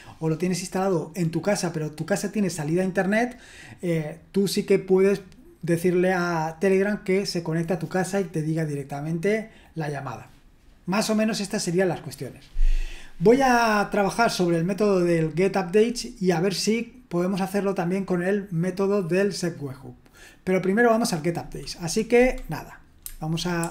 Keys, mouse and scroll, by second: 23.6 super+h.